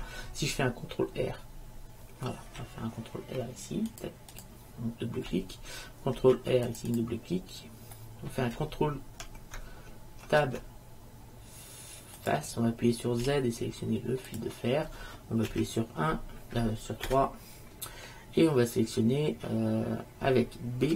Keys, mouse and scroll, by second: 2.6 ctrl+r, 6.4 ctrl+r, 8.1-10.3 middle drag, 10.4 ctrl+Tab, 13.4 z, 15.6 KP_1, 17.2 KP_3.